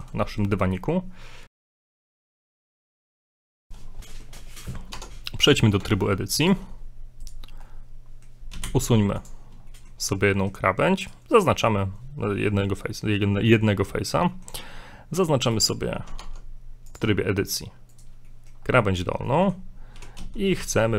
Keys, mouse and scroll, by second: 0.3 shift+middle click, 3.4 middle click, 4.0 shift+middle click, 4.0 shift+scroll up 1, 5.0 Tab, 5.6 scroll up 2, 6.0 ctrl+Tab, 7.2 right click, 7.6 middle click, 8.5 x, 9.7 shift+middle click, 11.0 right click, 11.3 right click, 13.0 middle click, 14.3 middle click, 15.5 right click, 16.2 ctrl+Tab, 17.9 right click, 18.3 shift+middle click, 18.7 scroll down 3, 19.2 middle click, 20.0 e.